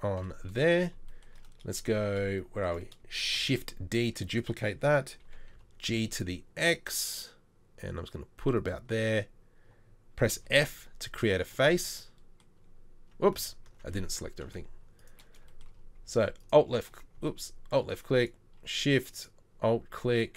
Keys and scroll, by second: 0.2 KP_7, 3.4 shift+d, 5.3 shift+d, 5.3 g, 10.4 f, 14.5 Delete.